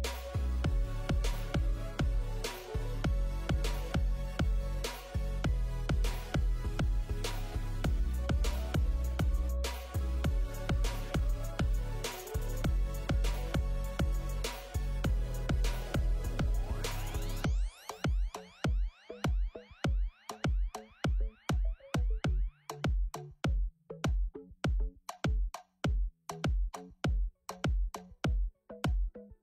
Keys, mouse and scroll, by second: 5.8 KP_1, 6.3 shift+click, 6.7 shift+click, 6.9-7.6 scroll up 3, 8.4 ctrl+i, 11.2 Tab, 12.8 middle click, 12.8 x, 14.4-14.7 scroll down 4, 14.4 KP_1, 15.6 ctrl+z, 15.7 ctrl+z, 16.1 click, 16.8 ctrl+r, 16.8 click, 20.3 click, 20.3 KP_1, 23.2 middle click, 23.7 KP_3, 24.3 KP_1, 25.0 click, 25.1 shift+click, 25.3 click, 25.4 shift+click, 25.5 shift+click, 25.6 shift+click, 26.4 KP_3, 27.0 KP_1.